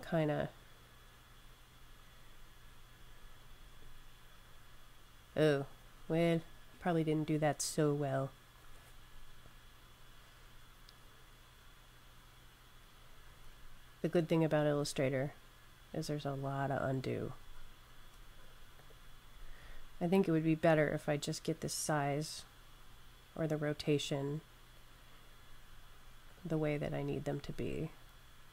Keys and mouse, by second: 0.5 click, 13.6 super+z, 14.6 super+z, 15.7 super+z, 17.3 super+z, 18.8 click, 26.2 click.